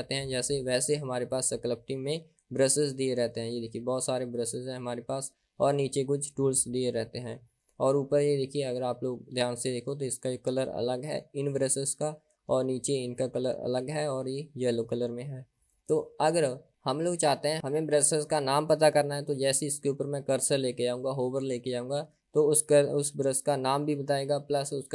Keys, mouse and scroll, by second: 3.1-3.8 scroll down 1, 3.8-5.0 scroll down 12, 7.5-9.2 scroll up 11, 14.5-15.9 scroll down 1, 15.9-16.5 scroll up 4.